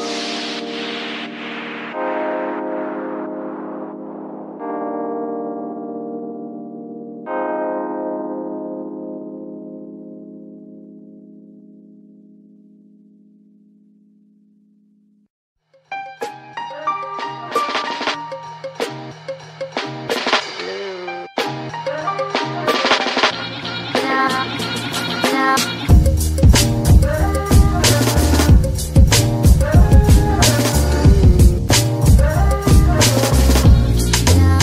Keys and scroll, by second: 0.8-4.4 typing, 4.7 Return, 7.3 g, 13.3 g, 15.4 s, 16.7 Tab, 17.2 s, 20.7 Tab, 23.1 z, 24.0 s, 25.2 Tab, 26.0 z, 27.9 shift+s, 30.6 shift+n, 34.5 ctrl+r.